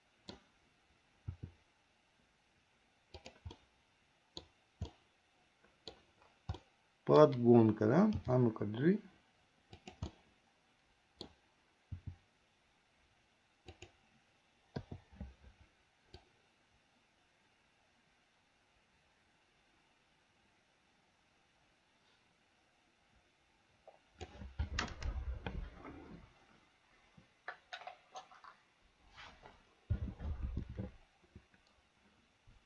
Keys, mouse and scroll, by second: 1.5 r, 3.7 middle click, 5.1-6.2 middle drag, 6.7 middle click, 8.4 g, 10.4-11.5 middle drag, 12.2 g, 15.0 i, 16.4-24.5 drag.